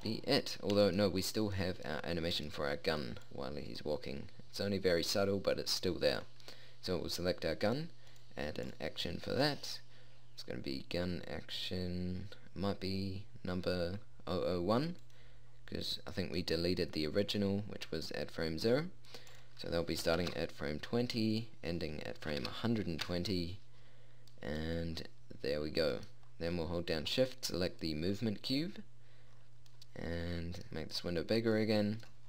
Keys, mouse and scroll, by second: 5.3-8.3 middle drag, 8.7-11.7 drag, 11.7-19.9 middle drag, 19.9-21.9 drag.